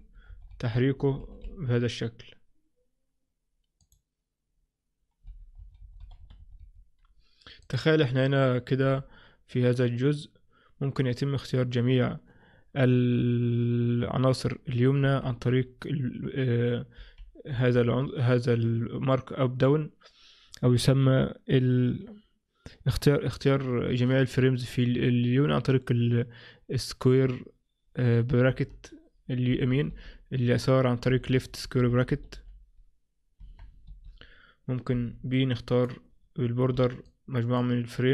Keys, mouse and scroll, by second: 0.0 Page_Up, 0.4 Page_Down, 0.6 Page_Down, 1.1 Page_Up, 1.3 Page_Up, 1.5 Page_Up, 3.9 click, 5.3 Page_Up, 5.7 Page_Down, 5.9 Page_Down, 6.1 Page_Down, 6.3 Page_Down, 6.5 Page_Down, 6.7 Page_Down, 7.7 click.